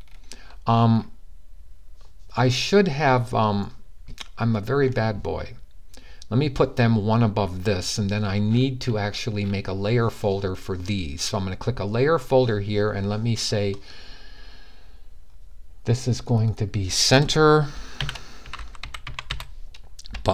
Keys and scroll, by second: 17.4-20.3 typing.